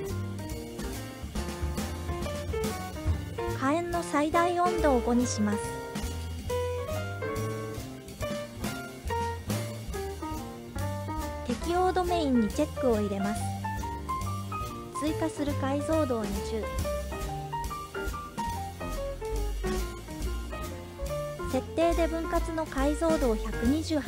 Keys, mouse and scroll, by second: 1.1 KP_1, 3.3-3.7 scroll down 1, 3.7-6.4 drag, 8.0 click, 10.1-11.2 scroll up 4, 12.0 click, 12.8 click, 15.1-18.5 drag, 19.9-21.1 scroll up 6, 21.1 scroll down 1, 22.0-24.0 drag.